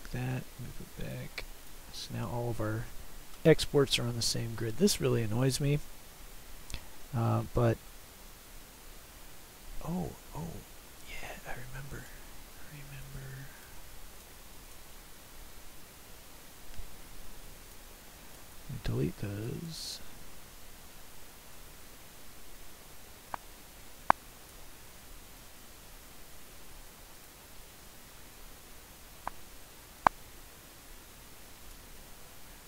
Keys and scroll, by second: 17.4 Delete, 18.5 Delete.